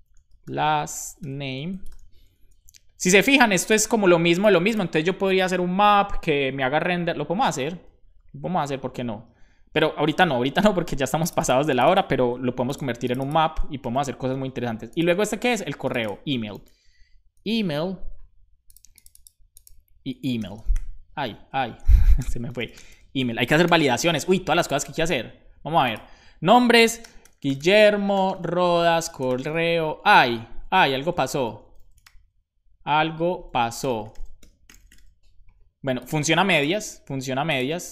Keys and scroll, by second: 0.0-1.7 typing, 2.8 super+c, 12.2 super+c, 13.8 super+v, 16.3-18.0 typing, 20.1-21.2 typing, 21.4 Right, 21.5 Right, 21.8 alt+shift+Left, 22.4-23.4 typing, 24.0 super+s.